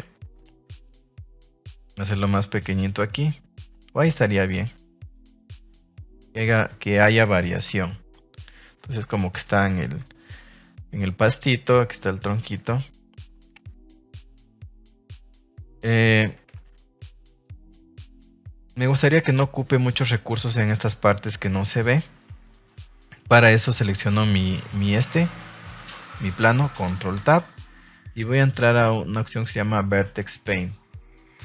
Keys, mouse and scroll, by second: 0.4-6.6 drag, 8.3 shift+middle click, 8.9 shift+middle click, 10.0 ctrl+s, 12.4 shift+middle click, 14.6 middle drag, 15.7 middle click, 16.4 KP_0, 21.7-22.0 middle drag, 22.7 ctrl+s, 23.4 right click, 27.1 ctrl+Tab.